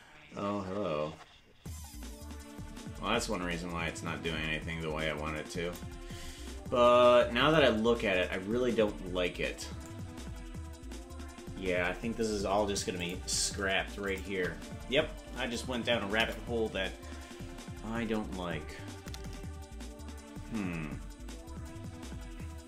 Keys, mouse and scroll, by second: 3.7-5.8 drag, 6.1-6.7 scroll up 10, 12.9 click, 14.0 shift+click, 16.4 Delete.